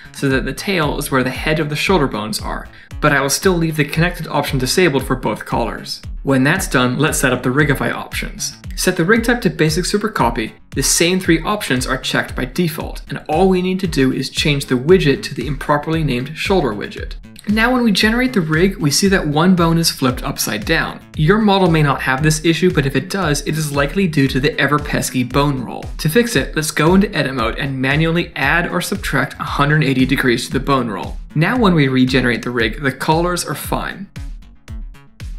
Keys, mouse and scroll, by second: 0.4 shift+s, 1.6 click, 1.9 shift+s, 2.7 shift+middle click, 3.6 click, 3.9 shift+s, 5.1 click, 5.4 shift+s, 7.0 Tab, 7.9 click, 8.2 click, 8.4 click, 8.9 Down, 9.0 Down, 9.1 Down, 11.3 click, 11.7 click, 13.5 click, 15.3 click, 15.7 click, 16.8 middle click, 17.1 shift+middle click, 18.1 click, 18.6 click, 18.9 middle click, 19.3 shift+middle click, 19.6 Tab, 20.0-20.3 scroll up 1, 20.4 click, 21.0 middle click, 22.5 click, 23.8 click, 25.8 ctrl+z, 26.2 ctrl+z, 26.5 middle click, 26.9 Tab, 27.3 click, 27.5 middle click, 28.3 ctrl+r, 31.0 middle click, 31.7 click, 31.9 middle click, 32.0 Tab, 32.5 click, 33.3 click, 34.3 click, 35.2 click.